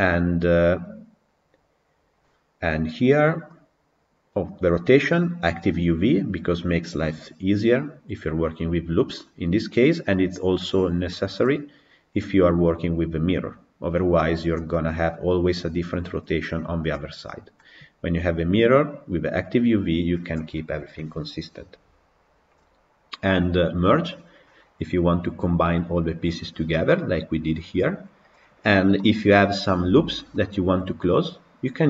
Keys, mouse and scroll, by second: 10.0-11.2 middle drag, 11.2-14.0 scroll down 2, 14.0-14.6 scroll down 1, 14.6-21.6 middle drag, 21.6 scroll up 2, 28.8 middle click, 29.5-30.0 scroll up 5, 30.2-31.8 middle drag.